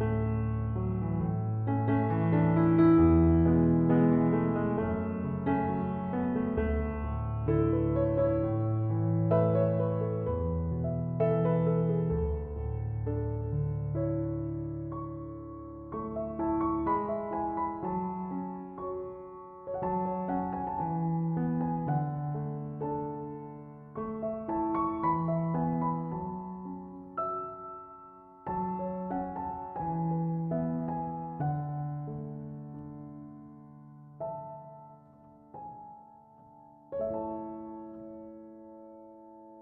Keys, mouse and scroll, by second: 21.2 Return.